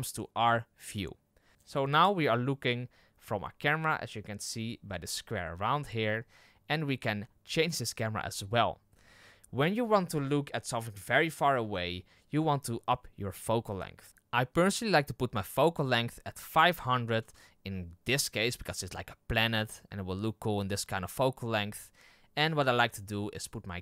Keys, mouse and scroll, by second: 14.1-17.1 drag, 17.1 KP_0.